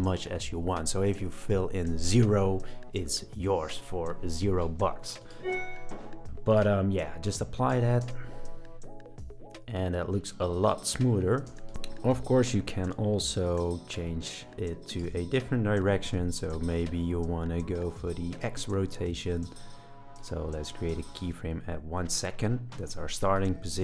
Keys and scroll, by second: 8.0 space, 11.5 space, 18.8 super+z.